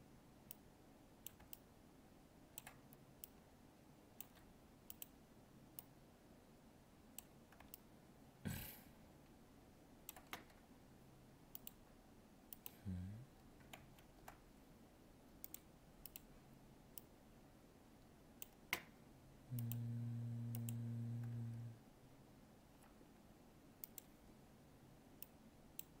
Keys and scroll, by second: 13.7 ctrl+z.